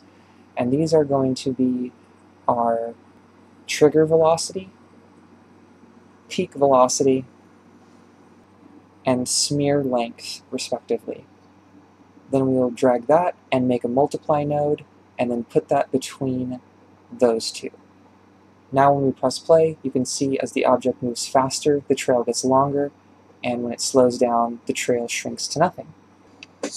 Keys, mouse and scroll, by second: 3.1-4.7 drag, 4.7 g, 5.6-10.0 drag, 11.8 drag, 15.0 click, 15.2 middle click, 15.4 scroll down 3, 16.1-17.6 drag, 18.4 shift+space, 18.7-20.8 scroll down 5, 20.9 ctrl+space, 26.2 shift+middle click.